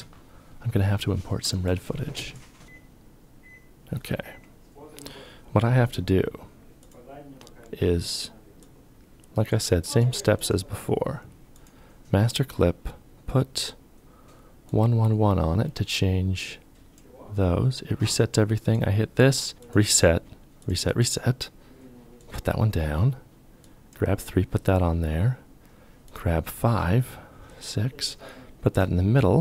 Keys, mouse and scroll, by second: 19.5 ctrl+z, 19.5 ctrl+y.